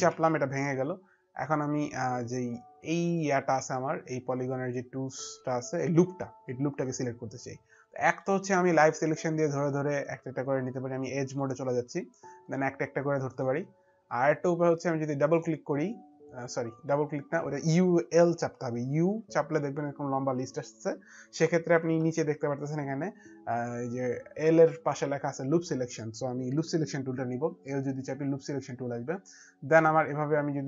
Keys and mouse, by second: 8.1 click, 9.4 click, 11.3 click, 13.8 click, 17.5 click, 27.7 l.